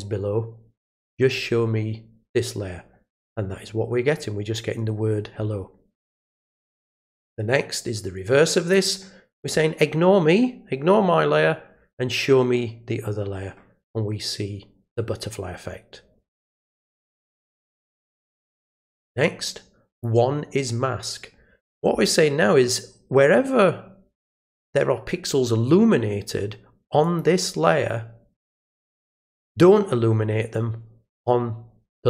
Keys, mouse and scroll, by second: 6.8 click, 8.7 click, 18.1 click, 19.9 click, 27.0 click.